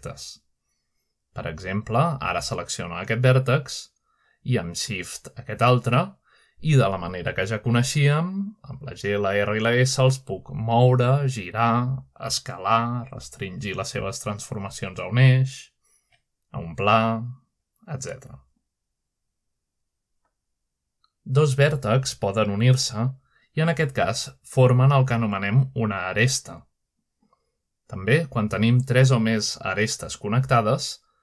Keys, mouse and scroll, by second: 0.0 click, 1.0 middle click, 4.4 click, 6.2 shift+click, 7.1 middle click, 7.9 shift+middle click, 9.1 shift+click, 10.6-10.9 typing, 12.0 click, 12.4-14.7 typing, 13.7-14.7 drag, 16.7-18.0 typing, 18.3 click, 19.1 middle click, 19.2 scroll down 1, 19.5 scroll up 1, 19.6 middle click, 20.0-21.1 middle drag, 20.2-22.4 typing, 22.5 click, 22.8-23.6 scroll up 1, 23.6 shift+click, 24.5 shift+click, 26.3-27.0 typing, 27.0 middle click, 27.6 click, 28.7 shift+click, 29.7 shift+middle click, 30.8-31.2 typing, 31.0 shift+middle click.